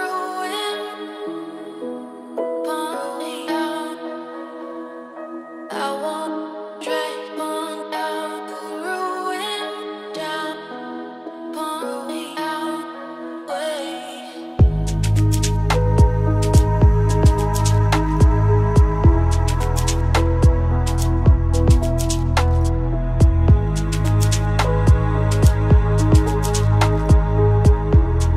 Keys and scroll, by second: 15.0 ctrl+g.